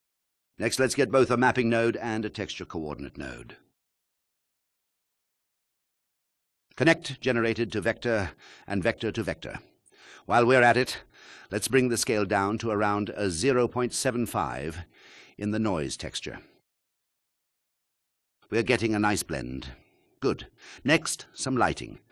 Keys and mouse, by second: 0.9 shift+a, 3.1 shift+a, 10.9-13.4 drag, 18.5 ctrl+alt+click, 20.5 KP_1.